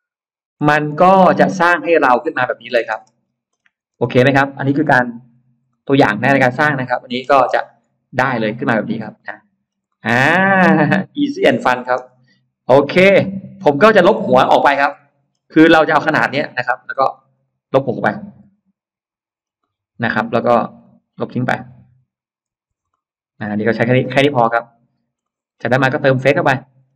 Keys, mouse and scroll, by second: 0.7-1.0 scroll down 1, 0.9 space, 1.1 middle click, 1.1 scroll up 1, 1.9 scroll down 1, 2.7 space, 2.8-3.5 scroll up 1, 3.9 click, 3.9 space, 5.5 Delete, 5.5-7.0 middle drag, 7.7-8.1 scroll up 1, 8.1-9.1 middle drag, 9.7-11.1 middle drag, 11.9 space, 12.0-12.3 scroll up 1, 12.5 click, 13.0 click, 13.3 click, 13.7 click, 14.3 scroll up 1, 14.8 middle click, 14.8 scroll up 1, 15.1-15.6 scroll down 1, 15.4 middle click, 17.0 click, 17.2 click, 18.9 Delete, 19.5 middle click, 20.7 click, 22.7 Delete, 22.7 middle click, 23.8 e, 24.1 click, 25.0-25.3 scroll up 1, 25.2 middle click, 25.7 middle click, 26.4-26.7 scroll up 1.